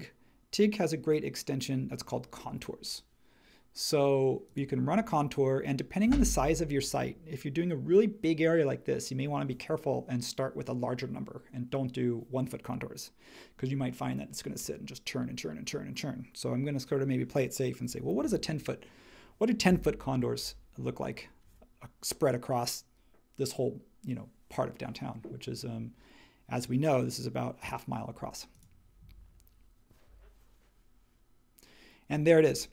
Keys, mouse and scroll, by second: 17.9-18.8 typing, 19.7 click.